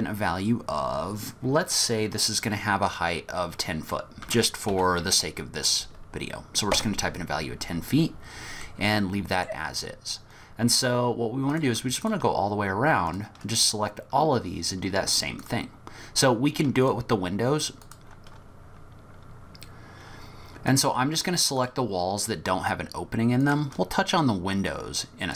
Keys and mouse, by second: 8.8 middle click, 11.5 click, 12.1-13.2 shift+drag, 15.4 shift+click, 16.8 shift+click, 17.8 shift+click, 21.6 shift+click, 23.4 shift+click.